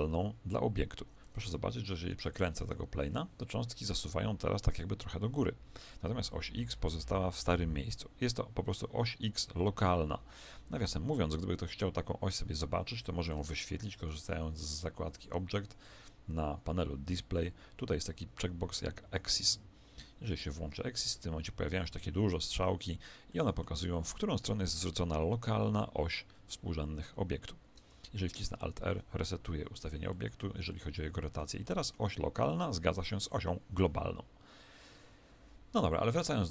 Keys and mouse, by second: 1.2 Escape, 1.7 r, 2.6 alt+a, 12.9 Escape, 13.3-16.7 middle drag, 15.1 click, 20.9-25.2 middle drag, 28.5 alt+r, 29.3-33.5 middle drag, 36.1 click.